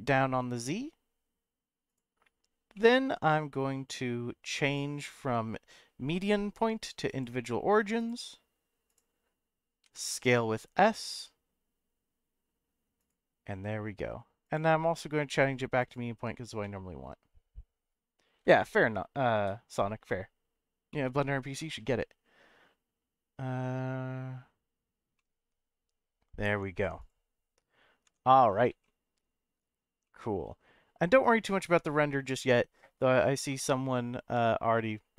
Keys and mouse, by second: 1.9 click, 2.7 middle click, 4.8-7.2 drag, 8.1 click, 9.8 s, 13.0 click, 14.5-15.9 drag, 16.6-18.2 middle drag, 18.5 shift+middle click, 20.9 middle click, 25.2-26.2 middle drag, 26.5 Tab, 27.0-28.0 drag, 28.0 Tab, 28.8 middle click, 30.0-31.5 middle drag, 34.2 KP_0.